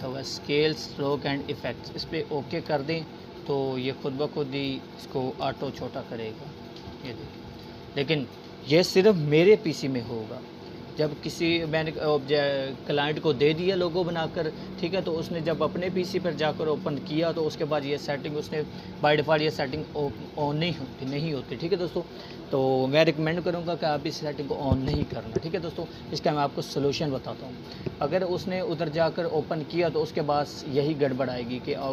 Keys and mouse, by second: 0.8-1.7 alt+shift+drag, 1.6-4.3 shift+drag, 14.5 click, 27.1 click.